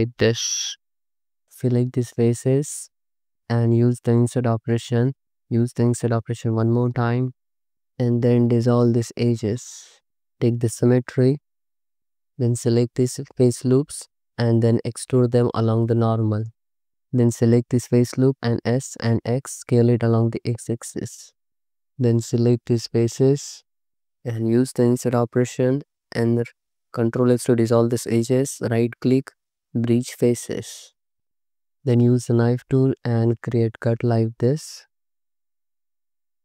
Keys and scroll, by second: 1.4 3, 4.0 i, 5.8 i, 9.5 ctrl+shift+x, 10.2 a, 12.0 3, 17.9 s, 18.2 x, 21.7 3, 24.7 i, 27.0 ctrl+x, 31.3 alt+z, 31.9 x, 32.8 space, 33.3 x, 33.8 space, 35.7 space.